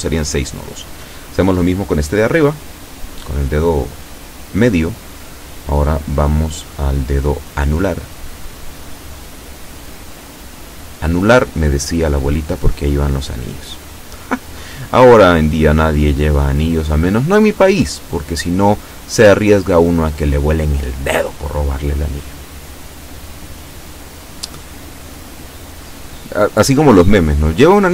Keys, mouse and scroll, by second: 1.1 g, 3.0 click, 3.8-5.0 shift+middle drag, 5.4 a, 6.4 b, 7.0 click, 8.4 g, 9.4 click, 10.0 shift+middle click, 11.6 a, 11.9 b, 12.4 click, 14.4 g, 16.0 click, 17.1 shift+middle click, 17.8 shift+middle click, 18.3 shift+middle click.